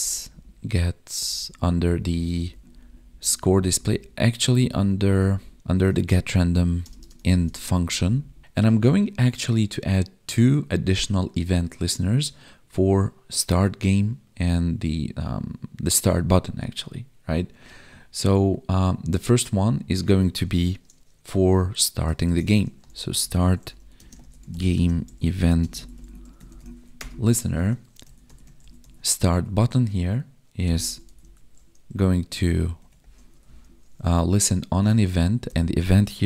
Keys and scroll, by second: 2.0 Up, 3.4 Down, 4.9 Up, 7.8 Up, 22.2 ctrl+/, 23.9 space, 24.7 space, 25.6 space, 29.3 Tab, 32.8 Tab.